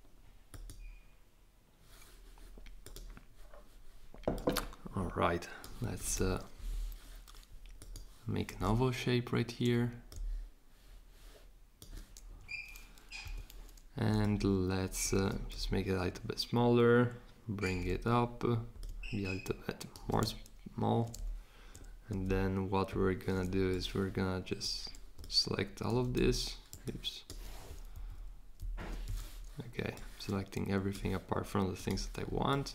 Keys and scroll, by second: 13.2 v, 26.1 super+z, 27.9 shift+Down, 28.5 shift+Up.